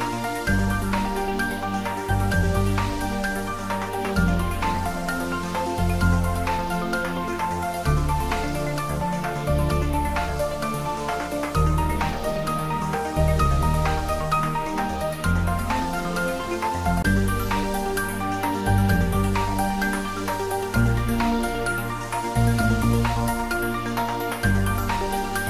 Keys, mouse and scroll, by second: 3.7 click, 6.8 click, 8.1 click, 9.8 click, 13.5 click, 17.0 click, 23.1 click.